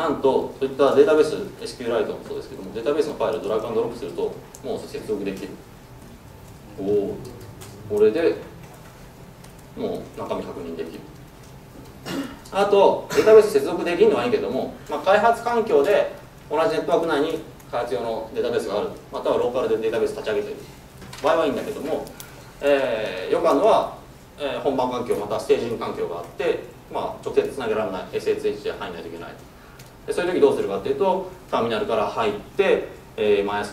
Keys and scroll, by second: 8.6 F4.